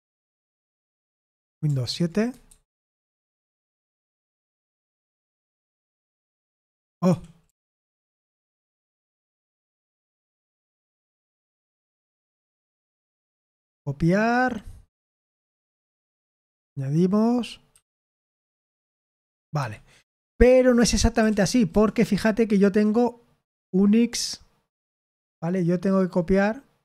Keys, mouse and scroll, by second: 2.4 super+7, 4.1 o, 6.2 ctrl+v, 7.0 Escape, 7.4 u, 8.5 o, 9.4 BackSpace, 11.1 i, 13.0 click, 14.3 right click, 14.9 click, 15.3 click, 15.8 click, 17.6 typing, 18.9 ctrl+v, 19.5 Escape, 20.6-21.9 typing, 24.0 click, 25.4 click, 26.1-26.8 drag.